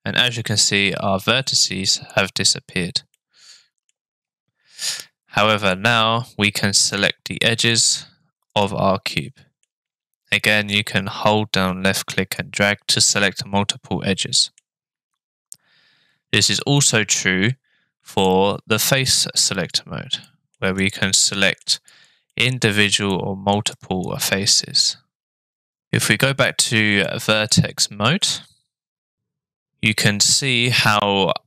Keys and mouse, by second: 0.0 middle click, 3.1 middle click, 5.6 click, 6.9 click, 7.7 click, 8.5 click, 9.2 middle click, 10.8-12.4 drag, 12.9-14.6 middle drag, 19.4 click, 20.2 middle click, 21.2 middle click, 22.3 middle click, 23.1 middle click, 23.7 click, 24.8-25.9 middle drag, 27.1 click, 28.2 middle click.